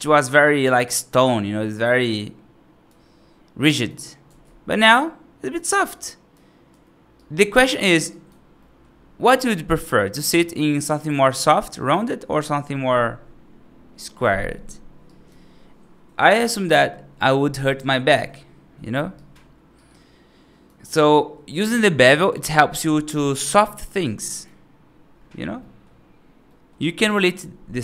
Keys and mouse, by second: 0.8-2.7 right drag, 3.5 right click, 4.3 ctrl+shift+z, 4.8 right click, 5.8 right click, 6.6 F2, 7.0 right drag, 8.0 right drag, 8.5 middle drag, 10.7-11.4 right drag, 11.6 right click, 14.9 right drag, 19.0 right drag, 19.6-20.5 right drag, 21.9 right drag, 23.0 right click, 24.0 right click, 25.4 middle click, 26.3 middle drag, 26.6 right click, 26.7 right drag.